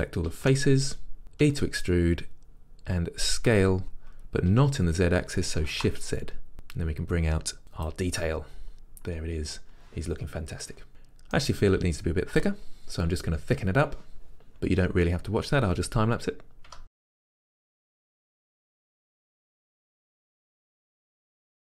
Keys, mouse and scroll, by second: 0.5 a, 1.5 e, 8.3-17.3 middle drag, 8.7-10.9 scroll, 16.8 Tab, 17.0 ctrl+z, 18.0 Tab, 18.0 middle click, 18.3 g, 18.7 click, 18.8 s, 19.6 Tab, 20.6 Tab, 20.7 3, 20.8 a, 21.3 e.